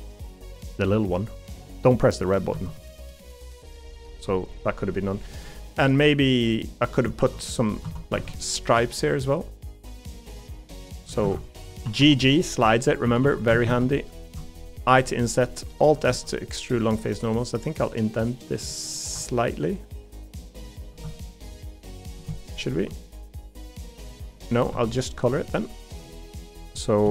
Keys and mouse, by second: 2.5 Tab, 3.1 middle click, 4.3 middle click, 5.5 middle click, 6.5 middle click, 7.2 ctrl+r, 7.8 Tab, 8.1 ctrl+r, 11.1 a, 11.8 g, 13.0 3, 13.2 3, 13.5 a, 13.6 a, 14.9 i, 16.1 alt+s, 24.7 ctrl+z.